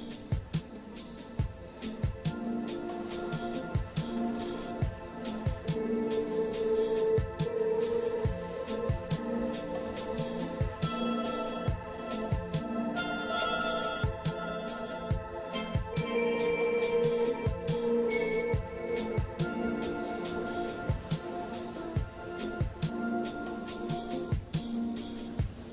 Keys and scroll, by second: 7.9 ctrl+z, 19.7-20.1 scroll up 2, 24.4 scroll down 1, 24.5 scroll up 1.